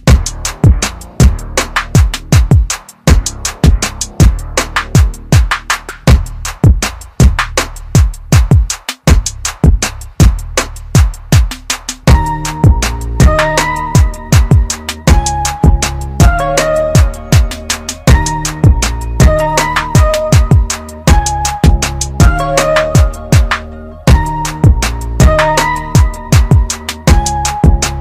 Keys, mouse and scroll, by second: 1.0 click, 4.4 click, 5.4 click, 7.7 alt+click, 11.3 alt+click, 12.3 click, 15.4 right click.